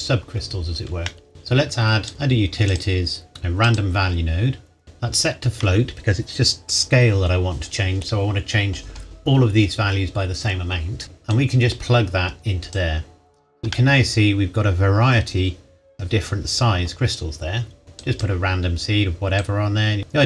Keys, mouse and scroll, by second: 1.1 middle click, 1.3-2.1 scroll down 2, 2.1 click, 3.6 click, 11.0 middle click, 11.3 click, 13.7 middle click, 18.0 click.